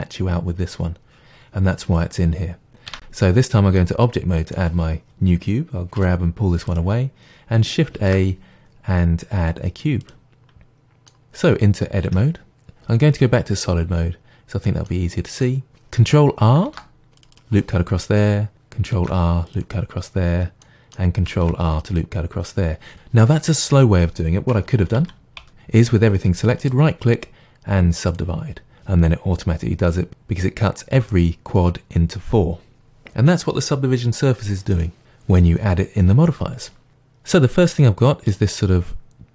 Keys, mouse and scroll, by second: 0.8 scroll down 2, 2.9 Tab, 3.8-6.0 middle drag, 6.0 g, 6.7-8.0 drag, 8.0 shift+a, 10.4-12.1 middle drag, 12.1 Tab, 13.6 click, 14.3 scroll up 1, 14.9-16.7 middle drag, 16.7 ctrl+r, 17.4-19.7 middle drag, 19.7 click, 20.6-22.0 middle drag, 21.4 ctrl+r, 22.0 click, 24.8 ctrl+z, 26.6-28.2 right drag, 37.6-39.3 middle drag.